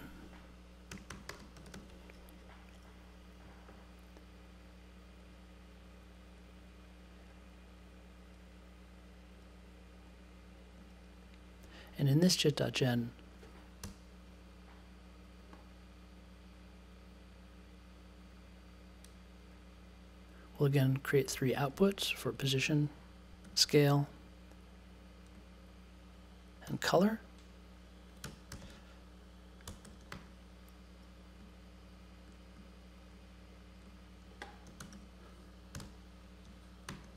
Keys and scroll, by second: 0.6-2.2 typing, 13.8 BackSpace, 23.4 2, 26.6 3, 27.9-29.8 typing, 30.1 super+j, 34.4-36.3 typing, 36.8 super+j.